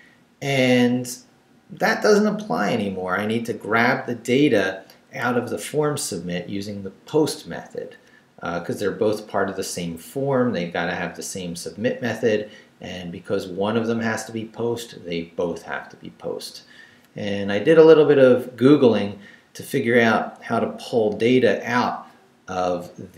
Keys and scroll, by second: 5.3 Left.